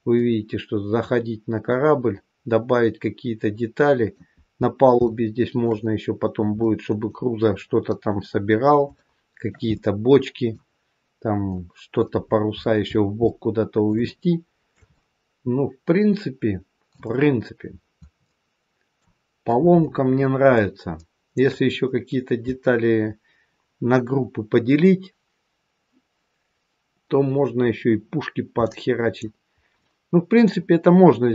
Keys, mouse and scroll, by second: 0.1 middle click, 4.6-5.0 scroll up 2, 5.0 shift+middle click, 6.5 middle click, 8.8 shift+middle click, 9.6 middle click, 9.6 scroll up 1, 11.5 middle click, 12.2-13.2 scroll down 10, 13.2 middle click, 13.9 shift+middle click, 14.1 shift+middle click, 14.8 middle click, 17.4-18.2 scroll down 4, 18.2 middle click, 19.9-20.3 scroll up 3, 20.5 middle click, 28.5 middle click, 29.7 middle click.